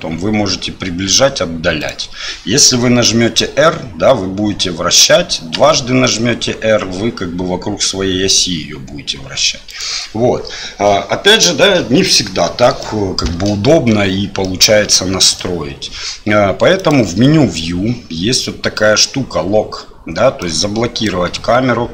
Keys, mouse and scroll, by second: 3.2 r, 12.8-13.5 middle drag, 14.4-15.4 middle drag, 16.7 click, 20.4 click.